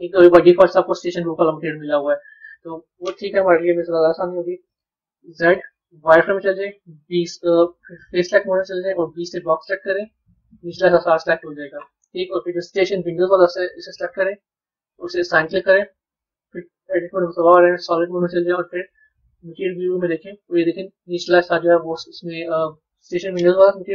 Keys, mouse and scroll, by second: 3.6 KP_1, 8.2 click, 12.9 click, 15.0 click, 16.2 Tab, 17.1 z, 18.4 z, 20.4-23.4 middle drag.